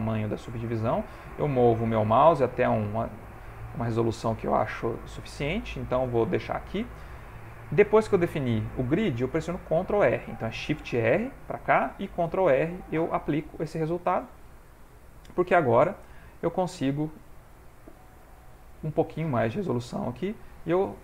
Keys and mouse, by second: 10.9 shift+r, 12.6 shift+r, 13.3 middle click, 15.1 middle click, 17.2 shift+click, 19.4 click.